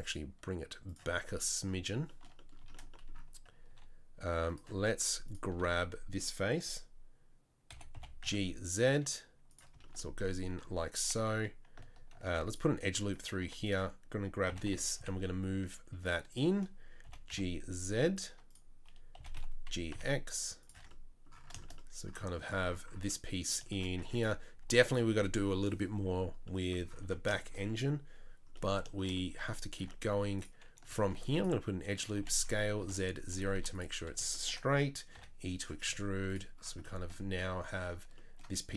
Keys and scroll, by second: 3.7 3, 5.5 3, 7.7 f, 7.9 g, 12.2 ctrl+r, 13.4 2, 14.5 g, 17.0 g, 19.1 g, 20.7 Tab, 24.0 Tab, 24.6 Tab, 27.0 Tab, 29.4 Tab, 29.7 Tab, 31.0 ctrl+r, 32.2 s, 33.5 3, 35.2 e.